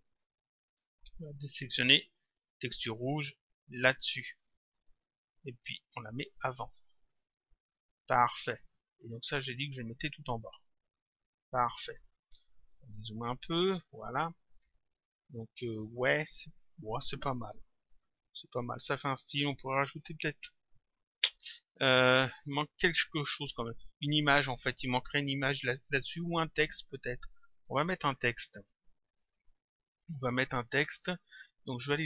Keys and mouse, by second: 0.1 click, 1.8 click, 5.9 click, 9.3 click, 12.9 click, 14.2 click, 27.7 click, 31.0 click.